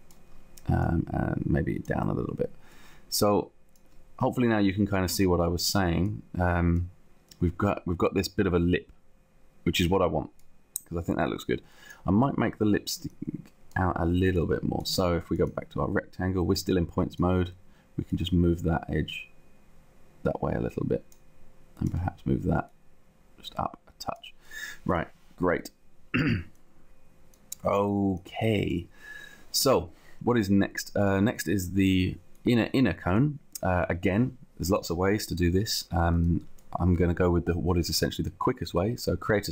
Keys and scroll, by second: 0.3 t, 1.9 space.